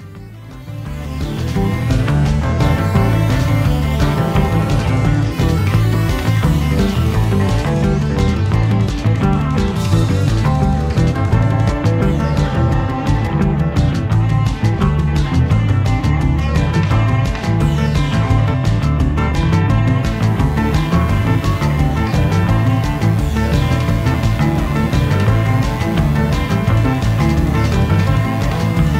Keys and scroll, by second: 5.1 a, 7.3 super+j, 9.3 v, 16.4 a, 19.0 super+j, 19.1 v, 19.8 a, 21.1 v.